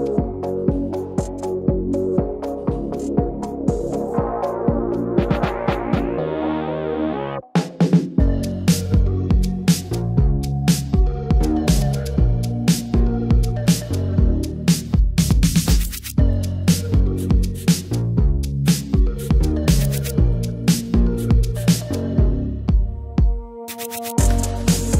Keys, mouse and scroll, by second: 0.8 click, 2.8 click, 3.0 click, 6.1 click, 7.4 click, 13.3-15.0 middle drag, 15.0-17.4 drag, 18.9 click, 19.3 click, 20.5 click, 24.4-24.9 drag.